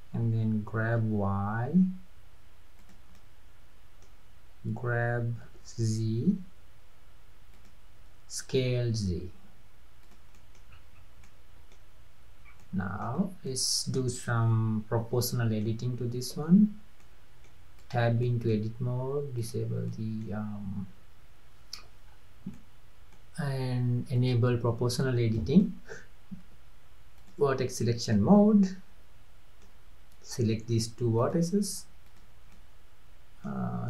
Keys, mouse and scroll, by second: 0.7 g, 3.2-5.5 middle drag, 5.5 g, 8.4 s, 10.4 middle drag, 10.7-11.1 scroll up 4, 11.3-12.5 middle drag, 12.5 scroll up 2, 12.6-13.2 middle drag, 13.2-13.5 scroll down 3, 13.5-16.4 middle drag, 16.4 Tab, 17.1-17.8 middle drag, 17.8 click, 18.3-19.4 middle drag, 19.4 click, 19.9-21.8 middle drag, 21.8-22.1 scroll up 2, 22.1-22.6 scroll down 2, 22.6-24.2 middle drag, 24.2 drag, 25.4-27.2 middle drag, 27.2 click, 28.2-31.2 middle drag, 31.2 click, 32.1 drag, 32.6-33.6 middle drag.